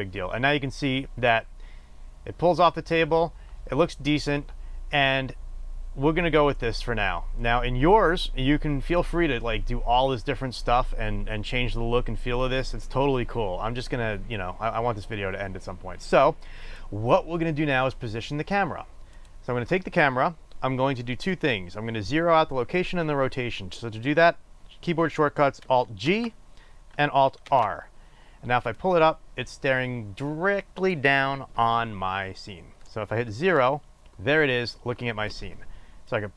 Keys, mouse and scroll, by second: 26.9 alt+g, 28.1 alt+r, 32.0-36.3 drag, 34.0 KP_0.